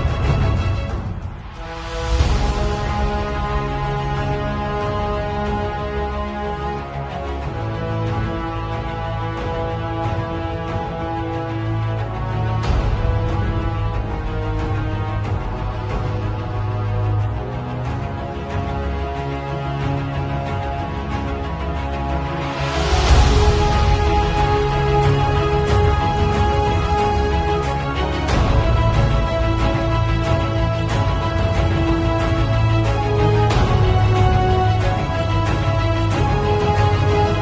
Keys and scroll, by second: 5.8 x, 6.3 alt+Delete, 6.8 x, 7.0 alt+Delete, 7.7 z, 8.2 space, 13.1-15.8 typing, 16.9 x, 17.4 x, 17.9 x, 19.0-20.2 typing, 21.3 x, 21.5 [, 22.1 [, 23.6 x, 24.2 [, 26.8 ], 30.8 ], 31.9-36.4 typing.